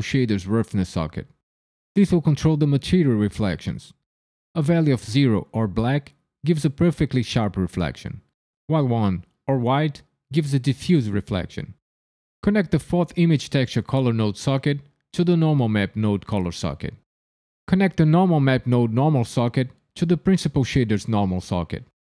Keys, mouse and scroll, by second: 14.3 click, 19.4 click.